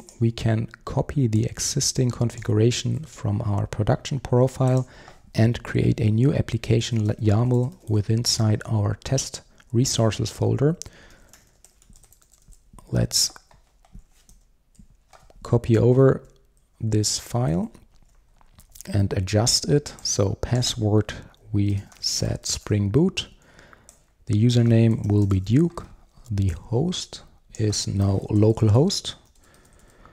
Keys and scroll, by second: 2.9 super+c, 5.6 super+c, 5.8 super+n, 13.1 super+v, 14.3 super+v, 16.1 super+1.